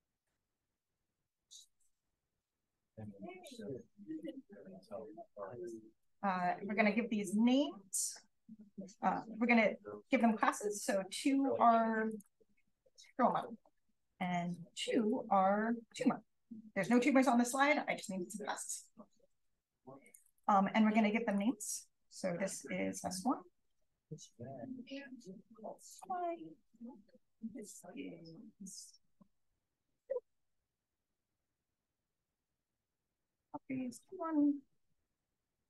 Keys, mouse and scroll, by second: 1.6 r, 2.0 click, 2.9 r, 3.4-4.7 drag, 5.9 click, 7.8 Return, 10.2 shift+click, 12.0 click, 13.2 click, 14.0 click, 14.9 click, 16.7 click, 17.8 click, 20.0 click, 21.2 click, 22.6-23.6 typing, 25.8 click, 27.4 click, 27.6-29.0 right drag, 28.8 click, 29.9 2, 30.9 click, 30.9 right click, 31.8 click, 31.8-33.4 right drag, 33.2 click, 33.6-34.5 typing, 35.0 click.